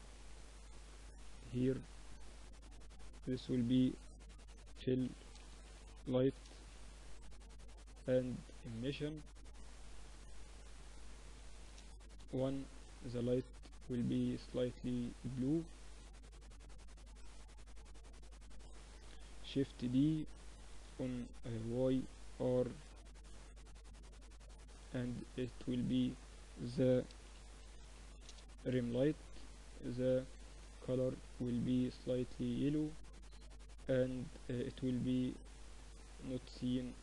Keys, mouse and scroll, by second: 0.4 g, 1.8-4.2 drag, 4.2 l, 6.6-8.4 drag, 8.6-10.4 drag, 11.7-13.5 drag, 15.4 s, 16.7 g, 18.3 KP_7, 19.8 shift+d, 21.6 r, 23.5-26.8 drag, 28.6-30.4 drag, 34.2-37.0 drag.